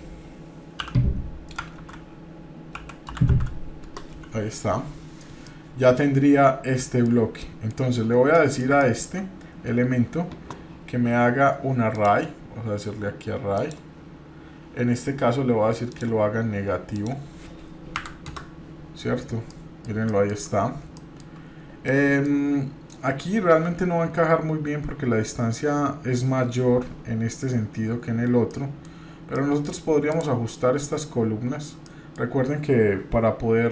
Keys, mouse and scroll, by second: 5.5-7.1 middle drag, 7.4-7.8 shift+middle drag, 8.0 scroll down 1, 8.3 middle click, 11.9-13.7 drag, 15.9-18.9 drag, 19.5-19.9 middle drag, 20.1-20.5 shift+middle drag, 20.5 scroll up 2, 20.8-21.3 shift+middle drag, 21.8 middle click, 28.5-28.9 middle drag, 28.9-29.3 scroll down 1, 29.3 middle drag, 30.1 click, 30.5 middle click, 31.8 middle click.